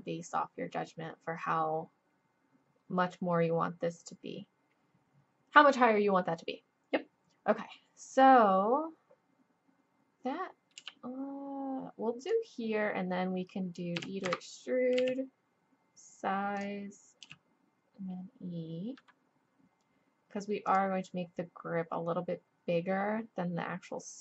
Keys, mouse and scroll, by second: 10.8 g, 14.0 e, 15.0 s, 17.2 e.